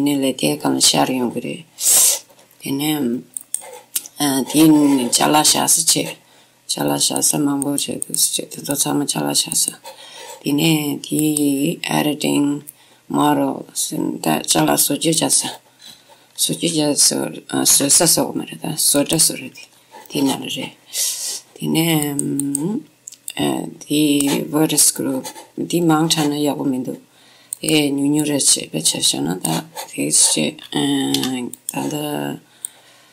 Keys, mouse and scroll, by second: 2.8-4.3 middle drag, 2.8-3.5 scroll up 1, 3.5-5.4 drag, 4.6 middle click, 6.0-7.9 middle drag, 7.3-13.1 drag, 11.4 typing, 16.0-18.5 middle drag, 16.0-16.5 scroll up 1, 16.5-17.8 scroll down 1, 18.3 w, 19.8-22.0 middle drag, 22.2-25.3 drag, 28.3-30.4 drag, 31.3 w, 32.8-33.1 drag.